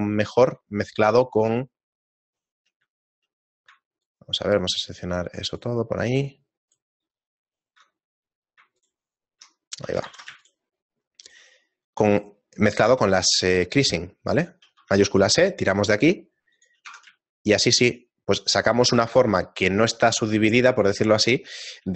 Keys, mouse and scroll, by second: 0.0 shift+middle click, 1.2 shift+right click, 1.3 shift+middle click, 1.9 shift+right click, 2.3 shift+right click, 3.3 middle click, 4.2 alt+right click, 5.5 alt+shift+right click, 6.0 alt+shift+right click, 6.7 alt+right click, 7.5 alt+shift+right click, 8.0 shift+middle click, 9.1 alt+shift+right click, 10.4 ctrl+z, 10.4 shift+right click, 10.8 shift+middle click, 11.5 shift+right click, 12.5 shift+right click, 12.9 shift+right click, 13.4 shift+middle click, 14.6 shift+e, 16.9 Tab, 17.3 shift+middle click, 17.7-18.1 scroll down 2.